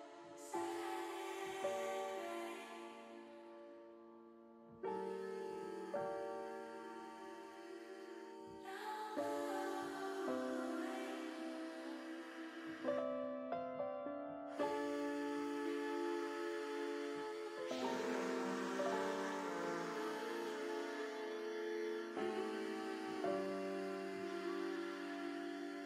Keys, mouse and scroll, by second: 0.6 click, 1.3 click, 3.2 click, 5.3 click, 7.1 alt+h, 9.2 middle click, 10.9 middle click, 13.0 click, 14.3 middle click, 18.0 shift+middle click, 18.8 middle click, 19.7 shift+middle click, 22.1 click, 22.6 middle click.